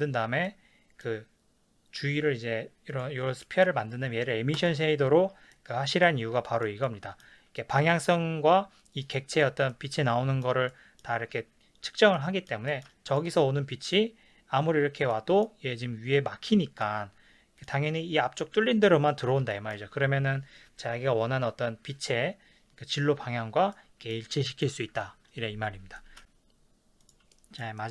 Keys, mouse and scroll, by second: 2.9 click, 3.4-4.7 middle drag, 4.7 click, 6.4-9.1 shift+middle drag, 9.1 click, 9.7-13.1 shift+middle drag, 13.1 click, 13.4-27.0 middle drag, 27.0 click, 27.3-27.9 shift+middle drag.